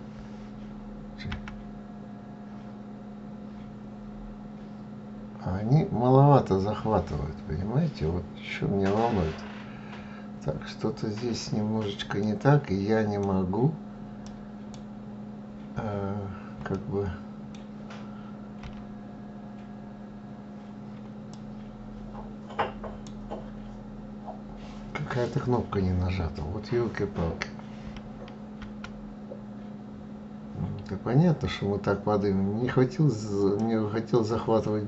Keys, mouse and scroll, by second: 0.8 g, 14.9 scroll down 4, 15.3 scroll up 4, 16.2-18.1 middle drag, 18.1 g, 23.0-23.5 scroll down 2, 23.5 scroll up 2, 28.1 g.